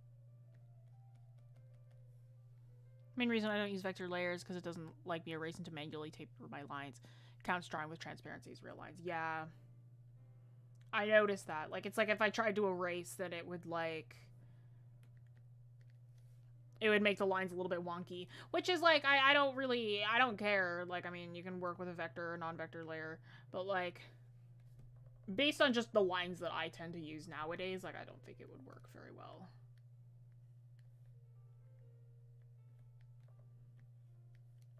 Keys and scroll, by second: 25.0 ctrl+z.